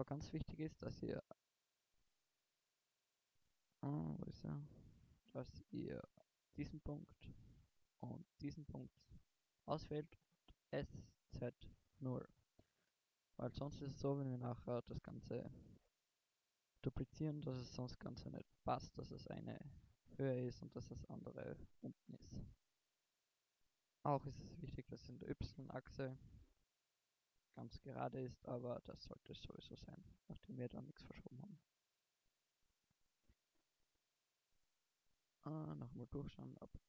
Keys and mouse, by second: 0.3-2.0 middle drag, 2.3 middle click, 3.8-5.5 middle drag, 5.5 g, 8.7-10.3 drag, 10.3 s, 15.6 KP_1, 18.8 KP_1, 27.7 KP_1, 28.7 KP_3, 29.4 middle click, 29.9 KP_1, 31.4 a, 33.4 a, 35.1 middle click, 36.5 KP_1.